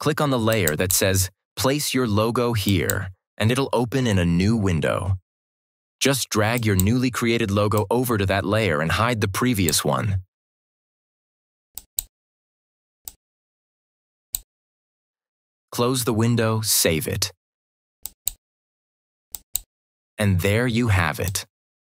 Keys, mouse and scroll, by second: 0.4 click, 6.5-9.8 drag, 17.9 click, 21.1 click, 21.7 click.